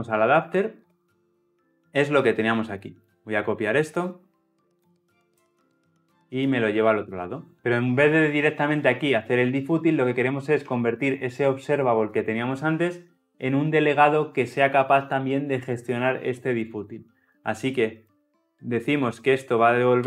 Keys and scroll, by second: 5.3 ctrl+c.